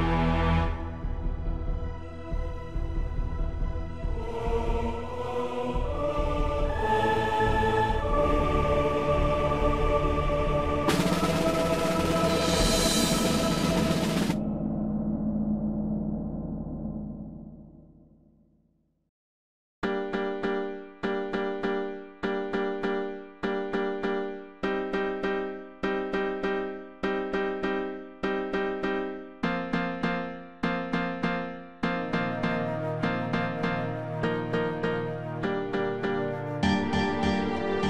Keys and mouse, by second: 3.2 click, 4.9 click, 6.3 click, 7.1-10.1 drag, 11.0 click, 13.5-15.3 drag, 16.8 click, 19.0-25.2 drag, 25.8 click, 29.9-32.8 drag, 32.9 click, 34.9 click, 36.4-37.8 drag.